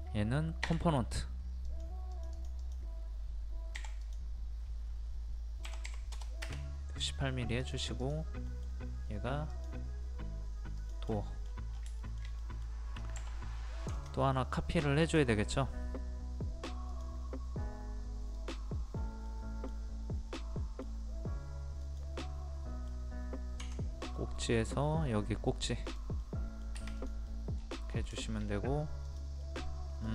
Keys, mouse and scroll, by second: 0.6 w, 1.7 click, 3.7 p, 4.0 click, 5.6 KP_1, 7.0 click, 8.4 middle click, 9.5 click, 11.1 middle click, 11.4 scroll down 1, 11.8 scroll up 1, 12.0 shift+middle click, 13.9-16.1 ctrl+drag, 18.8-19.3 scroll up 1, 19.3 middle click, 20.0 scroll up 1, 20.3 middle click, 21.8 click, 22.2 middle click, 24.1 middle click, 24.7 scroll up 1, 25.9 click, 26.2 middle click, 27.0 click, 27.3 middle click, 27.3 scroll down 1, 27.9 scroll up 1, 28.2 shift+middle click, 29.0 click, 29.4 middle click.